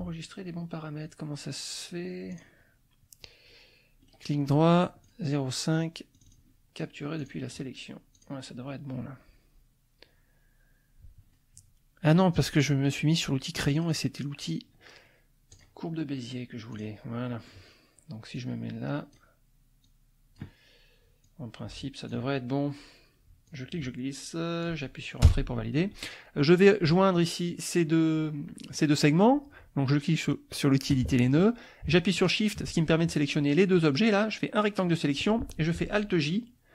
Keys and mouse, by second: 2.3 click, 4.1 right click, 5.0 click, 6.1 click, 7.2 click, 8.2 click, 13.8 click, 15.5 click, 16.7 click, 17.2 middle click, 18.4 click, 19.8 click, 21.2-22.2 drag, 23.5-24.8 drag, 25.2 Return, 30.9 click, 32.1 shift+click, 34.3 click.